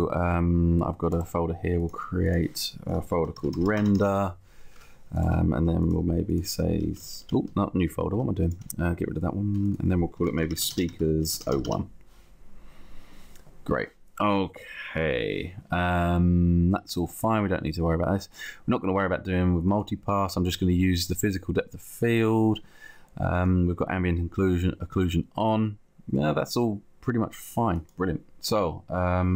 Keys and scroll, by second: 4.2 Return, 7.5 Escape, 8.9 Delete, 9.9 Delete, 11.7 Return, 12.7 Return.